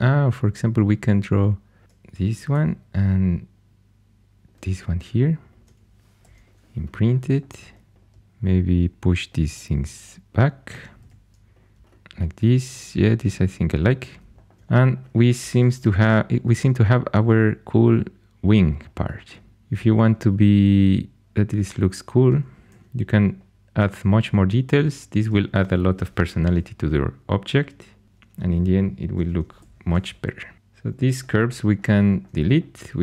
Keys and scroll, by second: 2.5 shift+d, 4.7 2, 6.1 shift+i, 7.9 3, 10.9 2, 11.8 shift+super+e, 15.4 shift+super+e, 22.6 shift+d, 24.9 2, 26.1 shift+i, 29.5 shift+i.